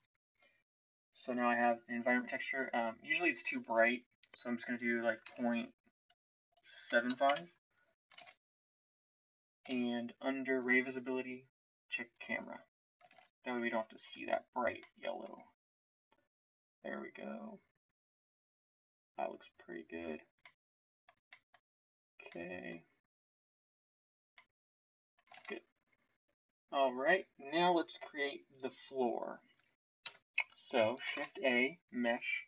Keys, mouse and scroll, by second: 8.2 shift+z, 9.7 shift+z, 13.1 shift+z, 25.3 shift+z, 30.0 KP_1, 31.0 shift+a.